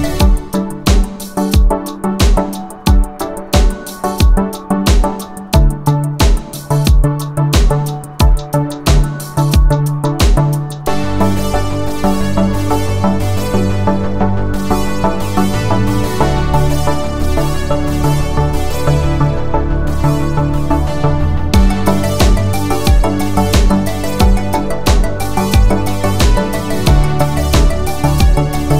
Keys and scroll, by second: 9.7 Escape, 10.0-11.6 typing, 13.2-13.9 typing, 14.8 Return, 16.2 ctrl+z, 16.3-17.0 typing, 18.2-19.3 typing, 20.1 Return, 22.0 space, 22.8 Escape.